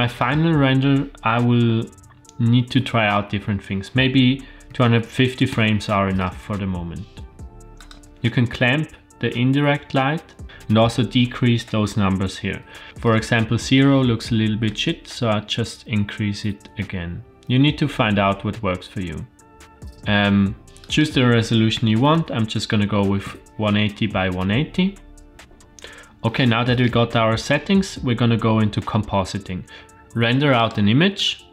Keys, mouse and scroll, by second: 0.2-6.5 drag, 7.8 click, 14.6-19.5 shift+drag, 20.8-24.5 drag, 22.1 KP_0, 25.3 click, 30.5-31.5 drag.